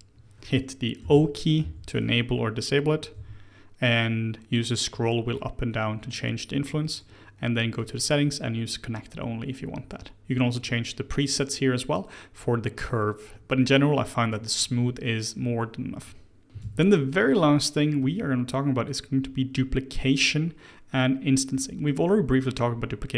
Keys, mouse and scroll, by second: 1.0 o, 1.5 o, 3.1 g, 7.7-10.8 drag, 16.4 x, 16.6 shift+a, 21.5-22.5 middle drag, 22.5-23.0 scroll down 1, 23.0-23.1 middle drag.